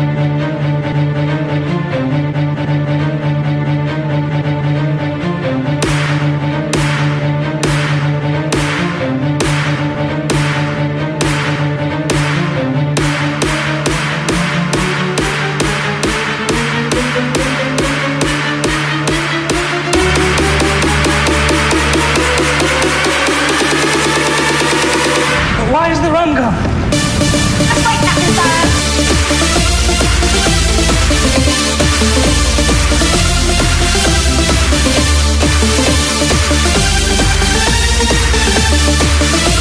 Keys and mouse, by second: 13.9-21.0 drag.